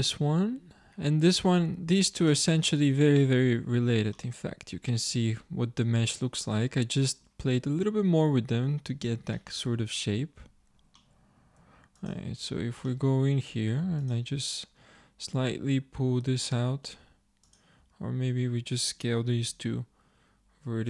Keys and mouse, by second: 1.6-3.3 drag, 3.3 middle click, 3.7 Tab, 4.2 middle click, 5.4-7.0 middle drag, 7.7 middle click, 11.7 Tab, 12.5 Tab, 12.5 click, 16.5 middle click, 17.9-19.4 drag, 19.5 s.